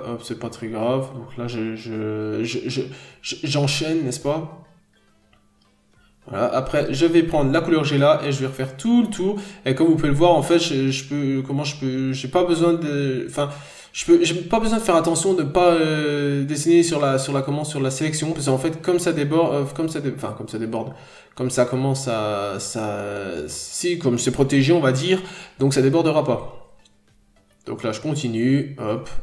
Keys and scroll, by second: 1.2 b, 2.5 n, 6.0 b, 7.0 scroll down 1, 7.1 n, 7.3 scroll up 1, 7.6 p, 10.2 scroll up 1, 10.4 n, 11.0 b, 11.6 scroll down 1, 11.7 n, 13.1 n, 18.6 n, 19.2 b, 25.3 n, 29.0-29.2 scroll down 1.